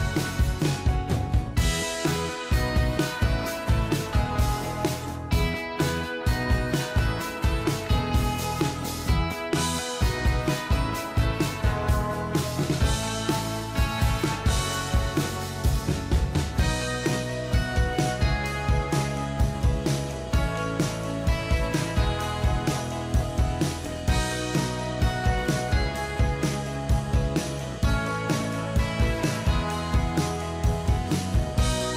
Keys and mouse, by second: 24.0 ctrl+click.